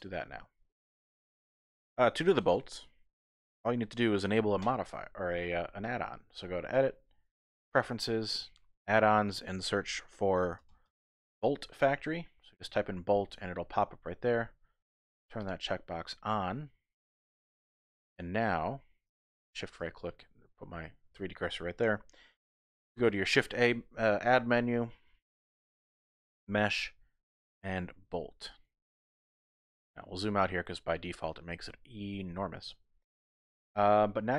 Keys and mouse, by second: 1.2 shift+click, 6.8-7.9 drag, 19.4 shift+click, 22.9 shift+a.